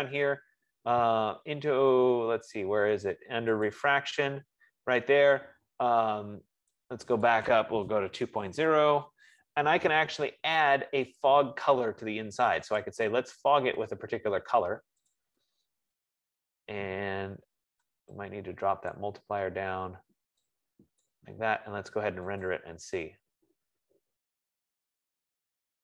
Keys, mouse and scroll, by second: 0.6 scroll, 3.9 click, 7.6 click, 8.2-9.2 typing, 11.4 click, 13.0 click, 15.8 click, 19.2 click, 21.4 click, 22.8 click.